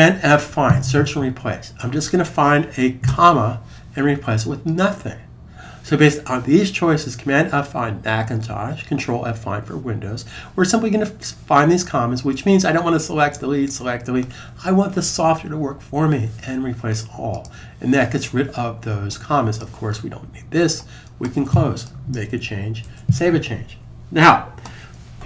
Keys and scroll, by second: 0.1 super+f, 2.8 ,, 22.6 super+s.